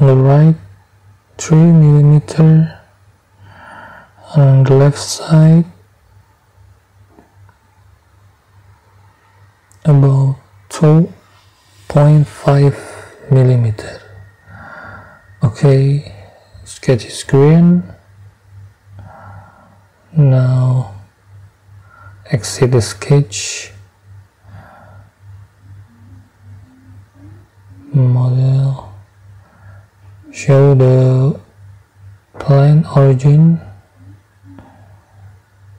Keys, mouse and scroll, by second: 1.6 middle click, 5.3-6.4 middle drag, 7.5 click, 9.0 middle click, 11.4 2, 12.3 ,, 12.9 5, 14.8 middle click, 16.4 click, 19.5 click, 19.7 middle click, 22.7 click, 25.1 click, 27.1 click, 28.5 click, 30.2 space, 34.2 middle click, 34.2 scroll, 34.3 scroll up 1.